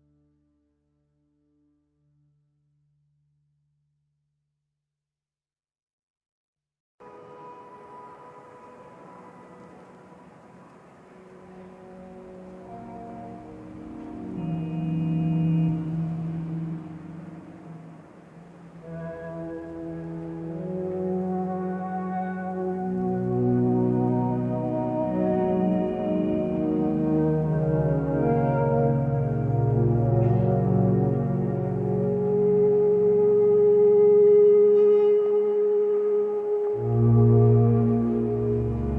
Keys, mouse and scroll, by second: 32.7 b.